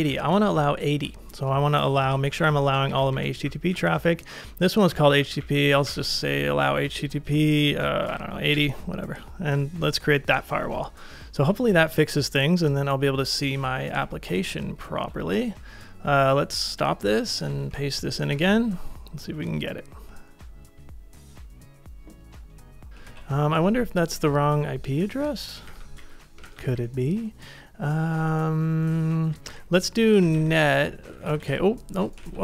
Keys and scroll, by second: 0.0 BackSpace, 0.1 BackSpace, 2.3 Left, 2.5 Left, 2.7 Left, 2.9 Up, 3.1 Up, 3.4 Right, 3.7 Right, 4.0 Right, 4.3 Right, 5.8 -, 7.8-8.5 typing, 8.5 Return, 13.7 super+Tab, 14.3 super+Tab, 17.6 super+v, 18.3 Return, 22.9 super+Tab, 23.0 super+Tab, 25.7 ctrl+a, 26.5 ctrl+a, 29.5-31.6 typing, 32.2 super+Tab.